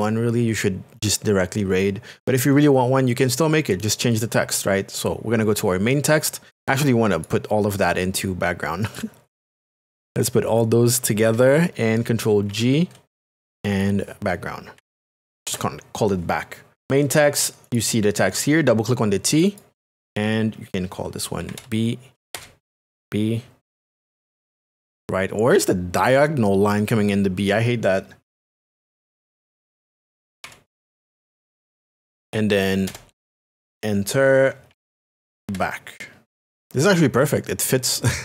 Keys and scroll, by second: 12.5 ctrl+g, 14.5-15.9 typing, 21.1-22.8 typing, 24.2 shift+space, 24.7 shift+r, 29.2-30.9 typing, 32.8 Return, 34.4-36.3 typing.